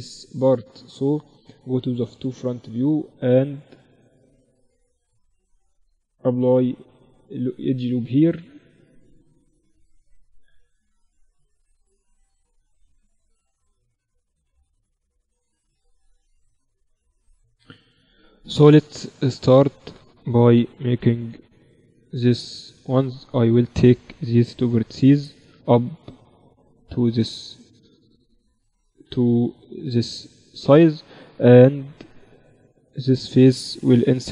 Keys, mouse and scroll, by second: 0.3 middle click, 1.1 KP_1, 1.7 z, 1.9-3.1 middle drag, 3.1-4.3 drag, 3.1-5.7 right drag, 4.9 Tab, 5.7 ctrl+r, 8.0-9.9 typing, 9.7-11.7 middle drag, 12.4-14.8 middle drag, 14.0 z, 18.1 KP_1, 20.1 z, 20.6-22.8 middle drag, 21.8 z, 22.8-25.2 right drag, 24.6-26.9 drag, 25.3 right click, 27.3 z, 28.4-30.4 drag, 30.3 right click, 30.4 z, 32.5-34.3 drag, 33.0-34.3 right drag, 34.2 i.